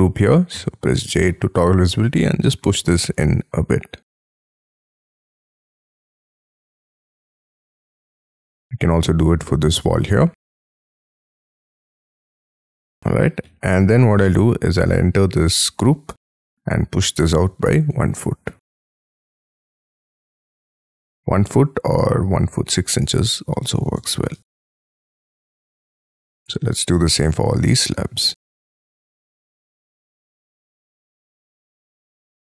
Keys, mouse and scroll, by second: 0.6 click, 0.6 j, 1.1 middle click, 2.4 scroll up 4, 2.7 p, 4.4 space, 4.6 Escape, 5.1 Escape, 5.6-6.4 scroll down 8, 6.6-7.3 scroll up 11, 7.5 middle click, 8.5 double click, 8.7 double click, 9.9 double click, 12.5 space, 12.7 Escape, 12.9 Escape, 13.2 Escape, 13.2 scroll down 6, 13.5 Escape, 13.9-14.4 scroll up 4, 14.4 double click, 14.9 double click, 16.2 p, 17.3 1, 17.9 ', 18.1 Return, 18.7 Escape, 18.7 space, 19.4 middle click, 20.3 double click, 20.7-21.1 scroll down 7, 21.2-22.0 scroll up 7, 23.0 6, 23.7 shift+', 24.0 Return, 24.3 space, 24.5 Escape, 24.8 Escape, 25.0-26.3 scroll down 24, 26.3 scroll up 5, 26.8 double click, 27.0 double click, 27.8 click, 28.7-31.0 typing, 30.5 Return, 31.2 Escape, 32.0 double click.